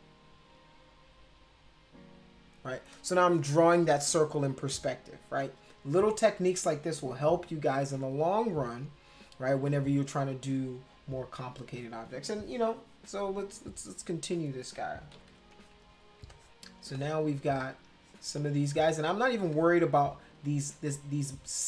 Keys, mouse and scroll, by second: 15.1 ctrl+=, 15.3 ctrl+=, 15.9 space, 16.3 click, 16.9-18.1 drag, 18.4 click, 19.5 click.